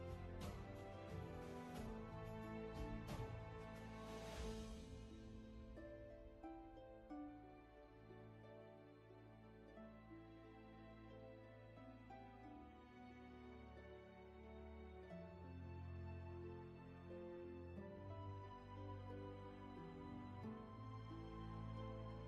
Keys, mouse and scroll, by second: 0.2 scroll down 1, 2.2-2.9 scroll up 1, 11.1 ctrl+z, 21.9 space.